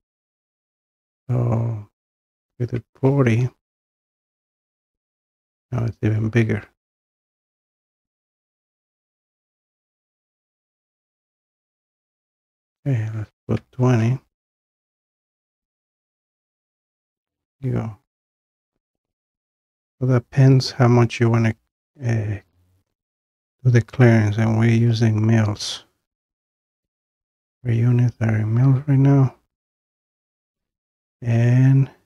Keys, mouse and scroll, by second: 0.5 click, 2.5-2.9 typing, 4.1 click, 8.1-8.4 scroll, 9.9 click, 10.1 click, 12.3 click, 13.6-13.9 typing, 15.6 click, 17.9 scroll down 1, 18.9-19.4 scroll down 1, 19.7-20.6 scroll down 2, 20.6-21.5 scroll down 1, 22.1-22.6 scroll, 26.3-27.7 middle drag, 29.6-32.0 middle drag.